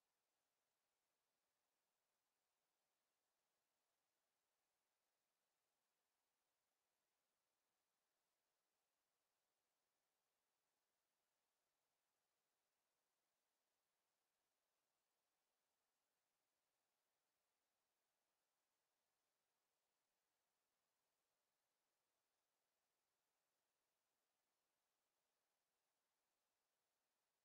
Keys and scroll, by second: 3.0 Escape.